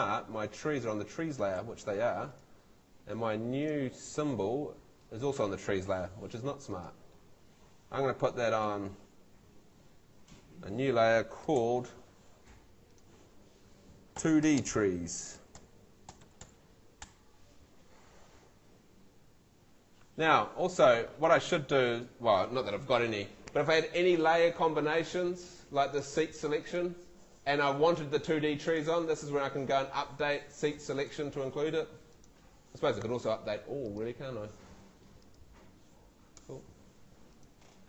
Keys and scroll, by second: 1.6 Escape, 3.0 Escape, 10.2 Escape, 11.4 super+Escape, 11.6 super+l, 13.9-16.9 typing, 17.1 Return.